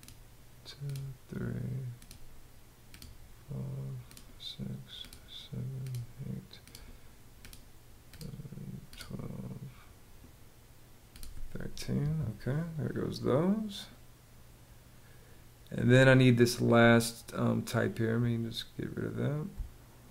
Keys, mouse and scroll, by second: 19.1 space.